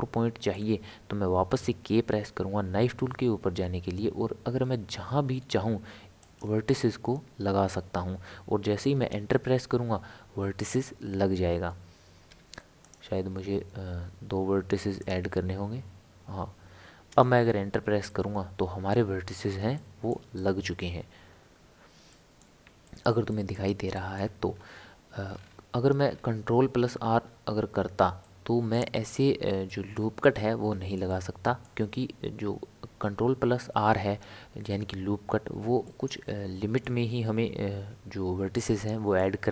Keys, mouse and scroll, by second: 1.5 k, 12.3 k, 18.1-20.8 middle drag, 20.8 scroll up 1, 21.0 scroll down 1, 21.3-22.0 scroll up 3, 22.1-24.5 middle drag, 24.5 scroll down 1, 24.6-25.3 scroll up 3, 25.3 scroll down 1, 25.4 scroll up 1, 25.4 scroll down 1, 25.4-25.9 scroll up 1, 25.9 scroll down 2, 26.0 scroll up 1, 26.1-26.7 scroll down 1, 26.7-27.1 scroll up 1, 27.1-28.2 scroll down 3, 28.2-34.3 middle drag, 35.8-39.5 middle drag.